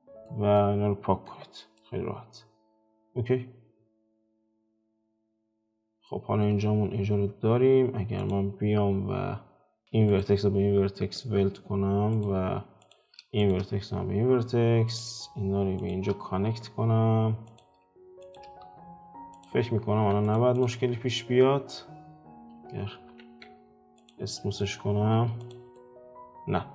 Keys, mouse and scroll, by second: 1.3 x, 1.8-4.0 middle drag, 4.0 scroll up 2, 4.2-5.4 middle drag, 5.4-6.0 scroll up 2, 6.0 shift+middle click, 6.6-7.1 scroll up 2, 7.1 Tab, 8.3-10.1 middle drag, 9.8 shift+space, 10.1 shift+click, 11.0 1, 12.1 click, 12.8 click, 13.4 shift+click, 13.8 1, 14.9 click, 15.8 shift+click, 16.5 2, 17.4 click, 18.2 shift+click, 18.6 2, 18.8-19.3 scroll down 4, 19.3 click, 19.5 scroll down 3, 19.9 Tab, 20.2 click, 20.5 click, 23.3 ctrl+3, 23.9 click, 24.3-25.1 middle drag, 25.1 F4, 25.4 click, 25.7-26.7 middle drag.